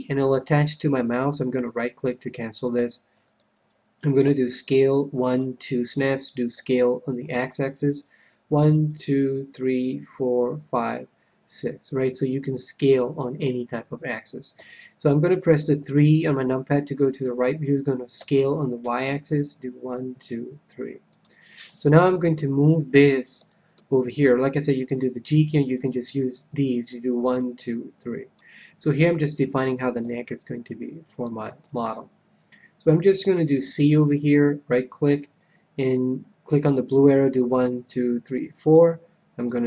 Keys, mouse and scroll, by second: 1.6-3.6 right drag, 4.2 s, 5.9-7.8 drag, 6.5 s, 11.9-13.7 drag, 14.5 KP_3, 18.1 s, 21.2-22.8 drag, 22.1-25.1 middle drag, 25.1-25.9 scroll down 1, 25.9-27.9 drag, 30.0 a, 31.2-33.6 middle drag, 32.9 c, 33.9-36.0 right drag, 35.8-37.5 drag, 39.4-39.6 drag.